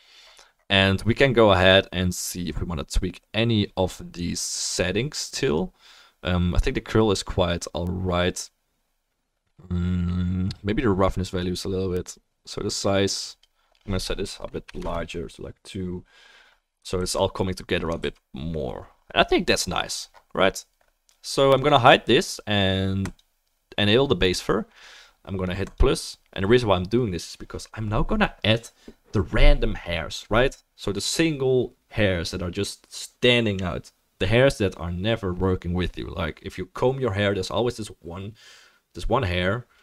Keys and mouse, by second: 17.0 ctrl+s, 18.0 ctrl+s, 25.7-39.8 drag.